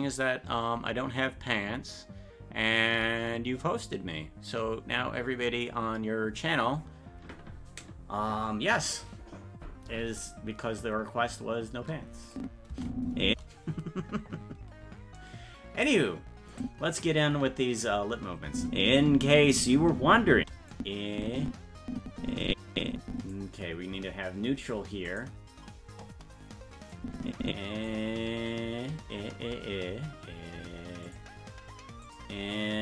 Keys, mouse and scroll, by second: 12.3 click, 12.7 space, 16.5 click, 18.5 space, 20.7-23.4 drag, 25.1 click, 27.0 click, 31.1 click, 32.1 click.